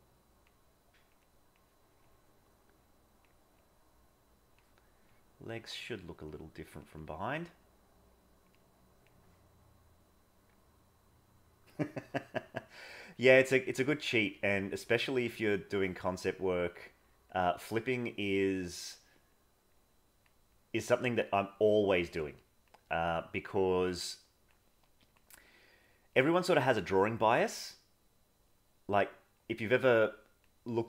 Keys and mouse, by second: 0.0 click, 0.6 click, 1.3 click, 2.0-3.2 drag, 3.5-4.5 drag, 5.0 click, 6.3 click, 7.0 click, 8.1 click, 8.5 click, 12.7 click, 13.3 click, 13.7 click, 14.4-15.7 drag, 16.3 click, 17.2 click, 18.6 click, 19.4 click, 19.8 click, 20.6 click, 21.6 click, 22.4 click, 23.1 click, 23.8 click, 24.8 click, 25.7 click, 26.2 click, 26.7 click, 27.3 click, 27.7-29.0 drag, 29.4 click, 30.0 click, 30.7 click.